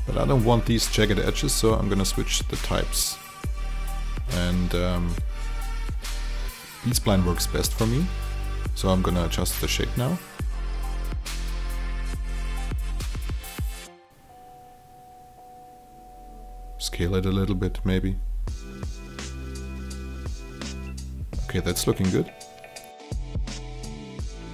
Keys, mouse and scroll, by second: 0.0 alt+right click, 1.1 click, 1.6 alt+click, 2.1 alt+middle click, 2.2 alt+click, 3.0 click, 3.3 alt+middle click, 3.6 click, 4.9 alt+click, 5.3-11.4 drag, 12.1 shift+click, 13.2 shift+t, 13.8-17.4 drag, 17.6 alt+click, 19.8 alt+middle click, 20.6 alt+click, 22.2 click, 23.7 shift+click.